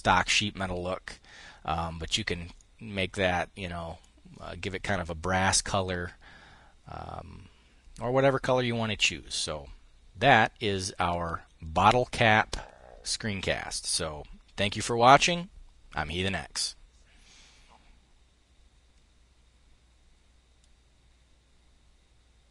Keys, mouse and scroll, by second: 2.0-3.7 drag.